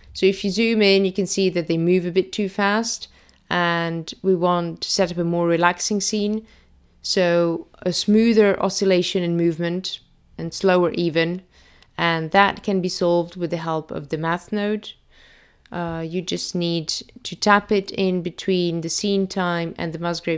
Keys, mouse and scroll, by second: 4.0-5.6 scroll down 1, 5.6 space, 7.1 click, 9.2 click, 16.3 shift+a.